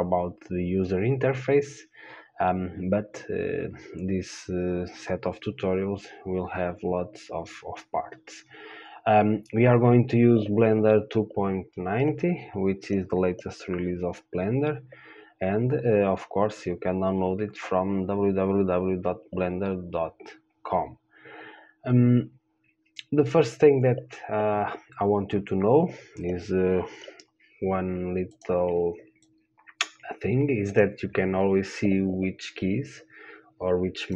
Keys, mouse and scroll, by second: 29.5-33.0 drag.